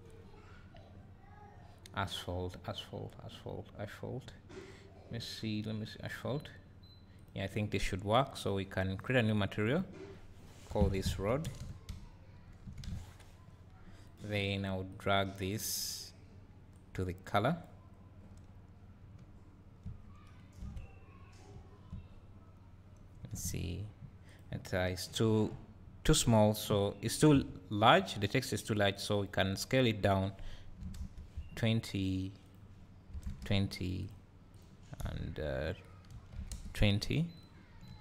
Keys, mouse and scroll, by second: 9.1 click, 14.1 click, 14.1 BackSpace, 16.7-24.4 drag, 19.2 `, 20.6 KP_Decimal, 21.1-21.5 scroll up 2, 21.5 `, 22.1 scroll up 1, 25.6 scroll down 1, 27.2 ctrl+t, 28.1 click, 28.9-32.1 drag, 34.0 click, 37.4 click, 37.9 `.